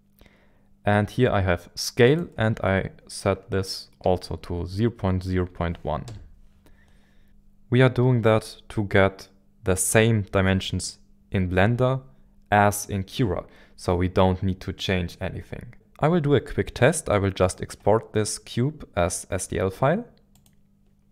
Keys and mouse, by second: 17.4-20.5 drag.